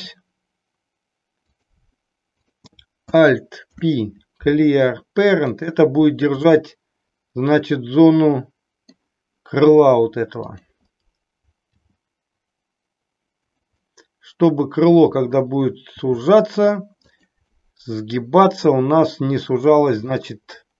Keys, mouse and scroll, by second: 3.5 alt+p, 6.5-9.1 middle drag, 10.4 click, 11.7 g, 13.5 click, 13.8-15.3 middle drag, 15.9 g, 17.5-19.4 middle drag, 20.1 middle click.